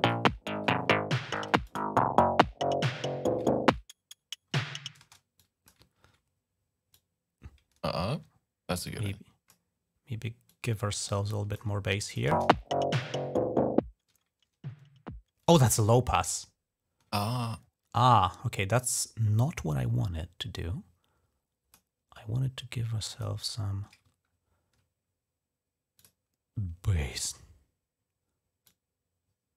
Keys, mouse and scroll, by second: 0.9-1.7 typing, 1.5 click, 3.3 ctrl+scroll up 3, 4.9 space, 5.2 click, 5.7 ctrl+scroll down 1, 6.8-9.3 drag, 10.3-11.4 drag, 11.9 click, 12.1 space, 15.6 space, 16.1-16.5 ctrl+scroll down 1, 18.7-21.6 drag, 22.9 click, 25.8 click, 28.5-29.5 drag.